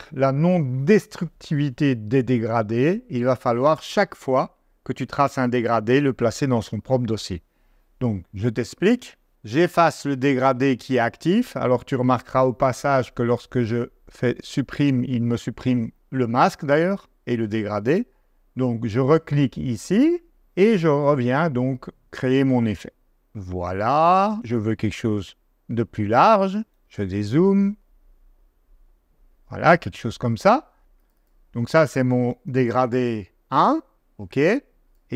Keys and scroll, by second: 14.0 BackSpace, 26.7 -, 32.2-33.7 typing, 33.9 Return.